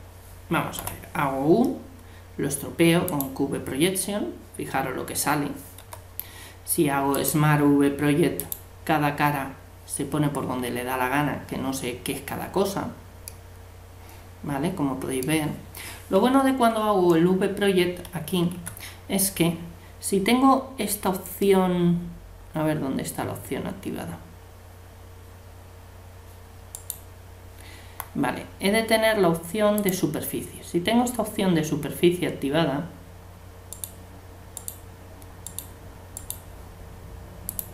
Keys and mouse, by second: 0.8 u, 5.8 u, 13.3 middle click, 18.6 a, 26.7-28.6 right drag, 29.8-31.5 drag, 33.7-37.7 right drag, 37.5 click.